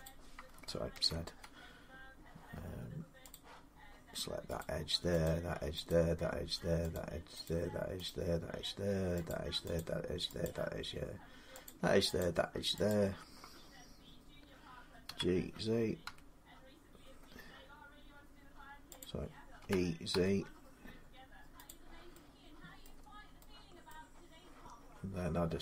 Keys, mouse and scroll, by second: 0.7 ctrl+z, 3.1 click, 4.4 click, 5.1 shift+click, 5.7 click, 6.7 click, 7.2 shift+click, 7.8 shift+click, 9.1 click, 9.6 shift+click, 10.2 shift+click, 11.5 shift+click, 12.0 shift+click, 12.7 shift+click, 14.8-15.8 typing, 18.8 click, 19.2-19.9 typing, 21.5 click, 21.5 z, 22.6 middle click, 22.8-23.2 scroll down 2, 23.7 middle click, 23.8 typing.